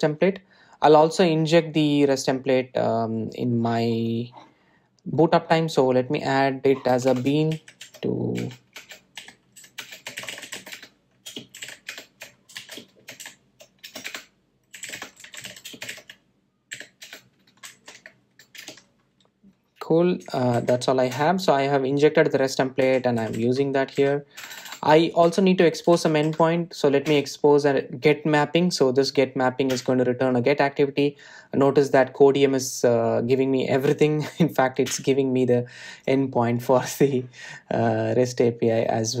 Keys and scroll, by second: 9.3 Return, 19.4 Return, 21.4 Tab, 21.5 super+e, 28.0 Return, 30.6 Return, 34.6 Tab, 35.8 Tab.